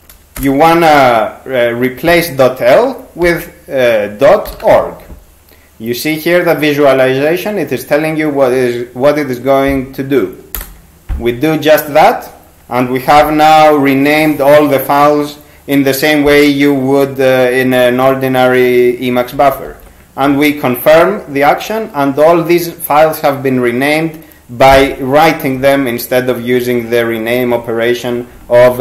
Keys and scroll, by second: 0.4 Return, 3.2-5.2 typing, 10.6 Return, 19.4 ctrl+c, 19.7 ctrl+c.